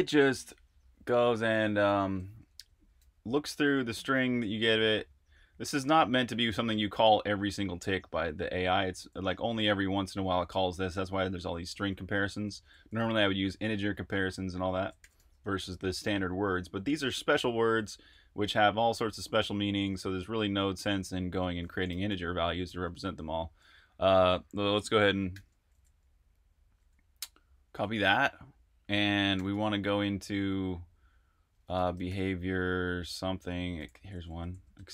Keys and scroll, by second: 2.6 Escape, 2.8-8.2 typing, 16.0-18.1 typing, 21.6-23.4 typing, 25.3 shift+y, 27.7 super+`, 29.1-30.0 typing, 31.5-32.6 typing, 33.8 Tab, 33.9 Tab, 34.1 Tab, 34.3 Tab, 34.5 Tab, 34.7 Return.